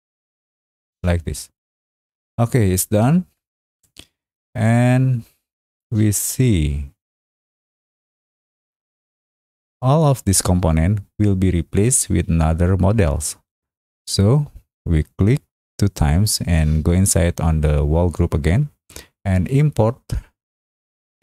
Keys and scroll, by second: 2.8 space.